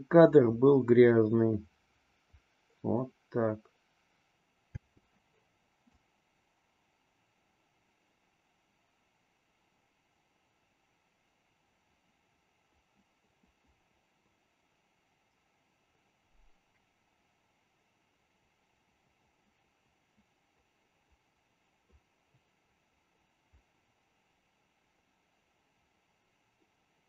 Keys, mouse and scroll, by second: 4.7 space, 5.8-27.0 drag.